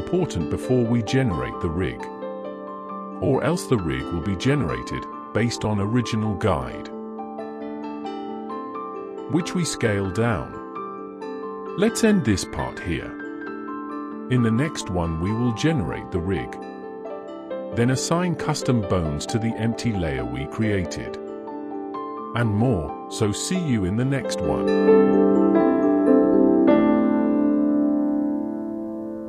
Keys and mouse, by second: 13.9 middle click, 14.1 click, 14.6 click, 15.2 click, 15.8 click, 16.3 shift+drag, 16.5 shift+middle click, 16.6 shift+click, 16.7 middle click, 17.0 click, 17.3 click, 17.3 middle click, 17.4 alt+a, 17.9 middle click, 18.1 middle drag, 18.1 shift+click, 18.7 shift+click, 18.7 middle click, 19.3 click, 19.5 shift+drag, 19.8 shift+click, 20.3 middle click, 20.8 shift+middle drag, 21.2-21.6 shift+middle drag, 21.7 middle drag, 21.9 middle click, 22.3 middle click, 22.7 click, 22.9 middle drag, 23.1 shift+middle click, 23.2 shift+middle click, 23.5 middle click, 24.0 middle click, 24.2 middle drag, 24.5 middle click, 24.6 click, 25.0 middle click, 25.2 shift+middle click, 25.3-25.6 middle drag, 25.8 ctrl+alt+s.